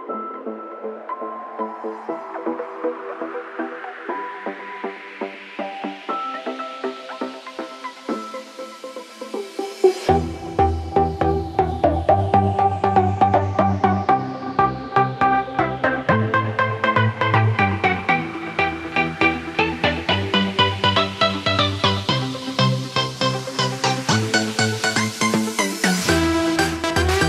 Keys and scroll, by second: 0.8 ctrl+z, 11.0 ctrl+z.